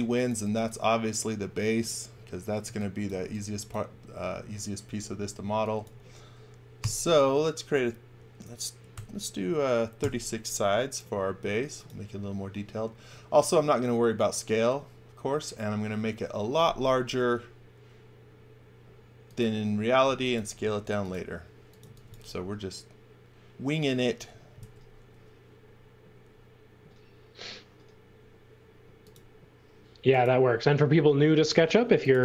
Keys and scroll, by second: 0.2 v, 2.6 x, 3.2 v, 5.5 x, 6.7 i, 8.5-9.4 typing, 9.9 Return, 20.0-22.5 typing, 24.5 l, 31.4 space.